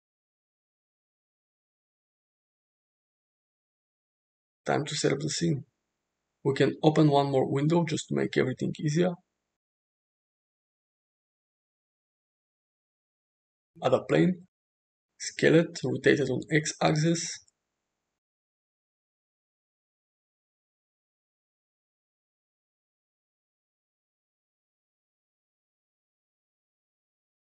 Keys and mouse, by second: 0.8 click, 2.3 KP_0, 3.8-4.5 shift+middle drag, 7.6-8.6 drag, 8.9 t, 9.3 t, 10.1 ctrl+`, 10.5 ctrl+`, 11.6-12.2 middle drag, 12.7 shift+a, 14.6 s, 16.3 r, 20.8 r, 21.8 g, 23.3 s, 24.6 r, 25.4 g.